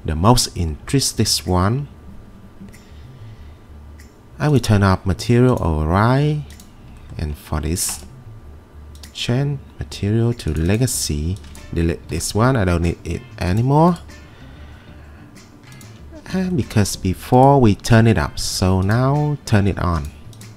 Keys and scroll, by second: 12.1 Delete.